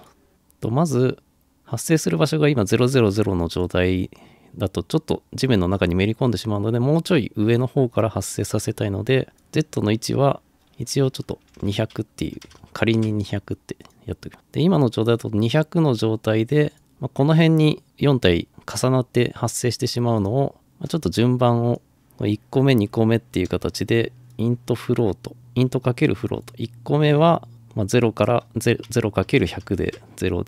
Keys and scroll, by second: 11.5 Delete, 11.7 Delete, 12.1-13.1 typing, 22.9 *, 29.1-30.0 typing.